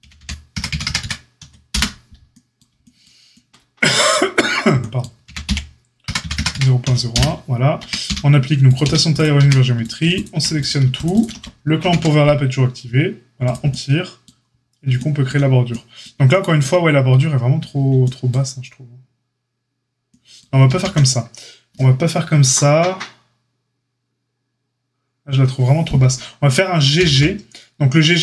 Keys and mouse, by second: 4.4 click, 5.2 g, 7.7 Tab, 8.0 q, 8.8 q, 9.3 Tab, 10.6 click, 10.9 alt+shift+click, 11.1 alt+shift+click, 11.7 ctrl+b, 20.6 ctrl+z, 26.9 g.